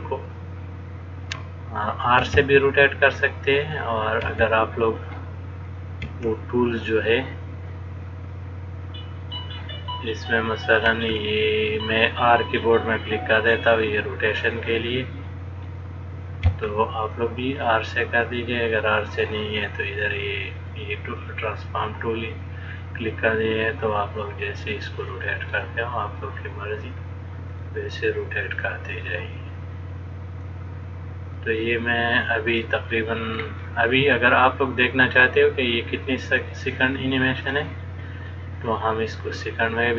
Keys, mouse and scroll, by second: 3.9 click, 4.4 r, 5.8 click, 6.2 r, 8.6 click, 10.4 click, 11.1 r, 13.7 click, 15.9 click, 16.7 r, 18.6 click, 21.4 click, 22.5 click, 23.9 click, 25.7 click, 27.0 click, 27.7 click, 28.8 click, 30.7 click, 32.9 middle click, 33.9 click, 34.5 click, 37.8 click, 39.3 middle click.